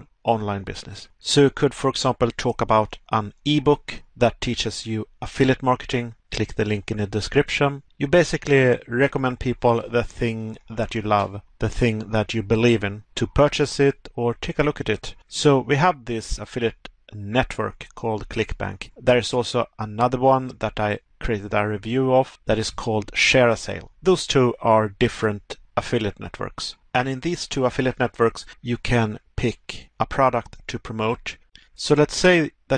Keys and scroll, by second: 3.0 Pause, 5.0 Pause, 6.6 Pause, 9.7 Pause, 11.5 Pause, 13.6 Pause, 17.0 Pause, 22.4 Pause.